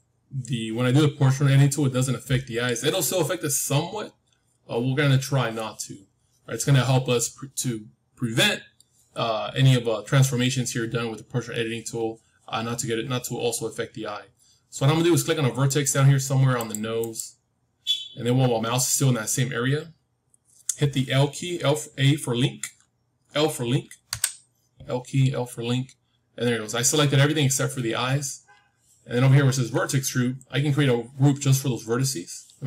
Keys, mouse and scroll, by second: 1.6-5.4 middle drag, 15.6-19.0 drag, 24.0 l, 25.7-26.4 scroll down 1, 26.4-27.8 middle drag, 27.8-28.5 scroll up 1.